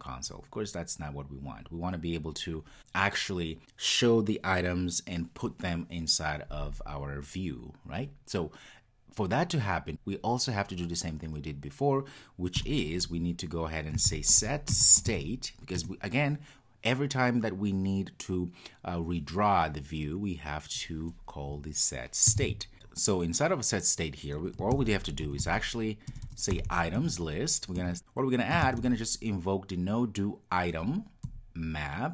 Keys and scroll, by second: 15.8 Return, 27.0 Return.